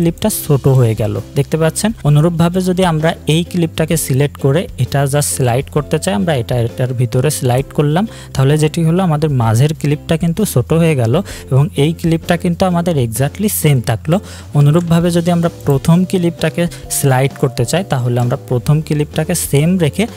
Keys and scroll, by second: 14.6 ctrl+z.